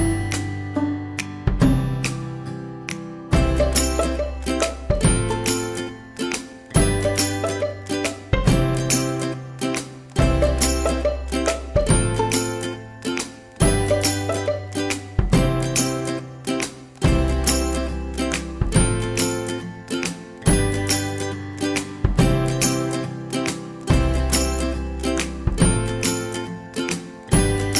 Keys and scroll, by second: 6.3 ctrl+z, 25.5 Delete, 26.5 ctrl+c.